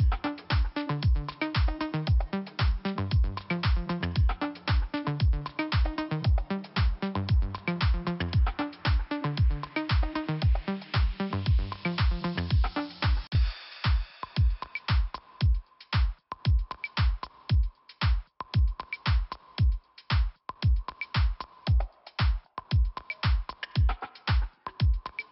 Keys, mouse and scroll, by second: 0.4 scroll down 1, 1.4 click, 5.4 click, 5.6 click, 6.2 click, 7.4 click, 8.1 click, 9.7 click, 11.0 click, 12.9 click, 15.4 scroll up 1, 15.9 click, 17.6 click, 19.8 click, 23.1 click, 24.8 click.